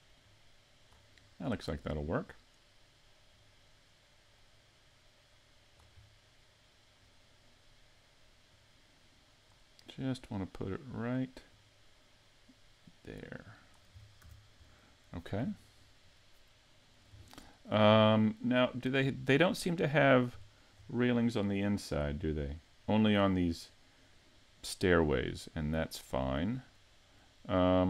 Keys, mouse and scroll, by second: 0.2 click, 1.2-1.6 scroll up 2, 1.6 middle click, 2.2 right click, 3.3 click, 6.0 middle click, 8.5 click, 10.3 click, 11.5 click, 14.0 scroll down 1, 14.2 a, 14.7 middle click, 15.4-15.9 scroll down 5, 15.9 middle click, 17.3 shift+middle click, 18.0 scroll down 1, 19.0 scroll up 4, 19.7 middle click, 20.5 shift+middle click, 21.2 scroll down 2, 21.6 middle click, 25.1 middle click.